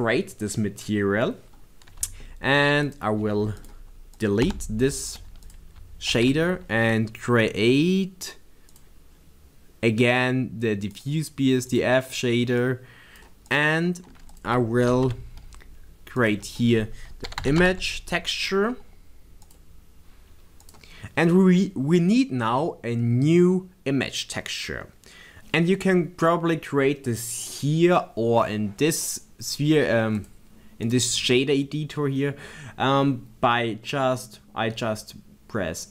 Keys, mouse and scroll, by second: 4.2 click, 4.4 l, 6.7 shift+a, 11.7 click, 13.2 click, 15.3 shift+a, 21.7 click, 30.3 click, 32.3-35.1 right drag, 35.1-35.9 drag.